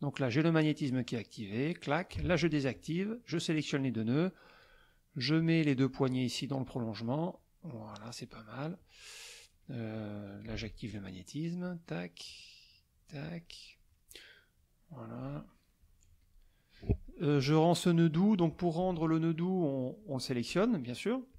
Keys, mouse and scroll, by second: 0.9 click, 2.7 shift+click, 5.3 click, 7.3 click, 8.2 middle click, 10.9 shift+click, 12.2 click, 13.2 click, 14.5 click, 15.8 click, 20.4 click.